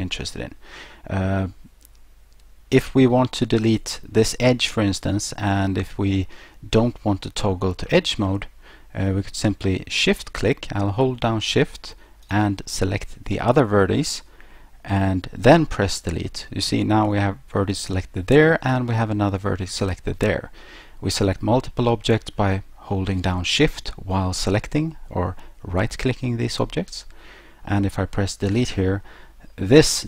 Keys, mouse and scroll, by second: 0.1 middle click, 12.2 shift+right click, 28.5 Delete.